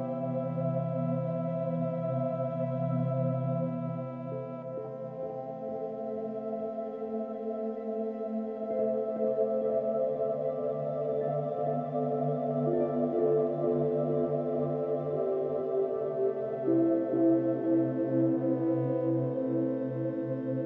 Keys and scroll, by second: 17.7-19.2 space.